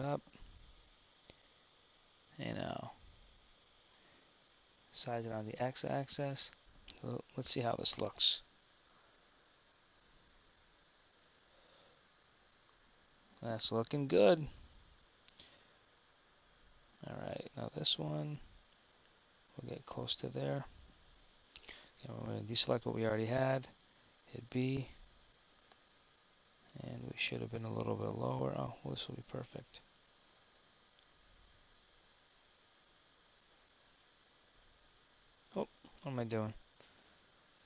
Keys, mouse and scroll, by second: 6.6 Tab, 20.1 Tab, 22.0 a, 24.1 b.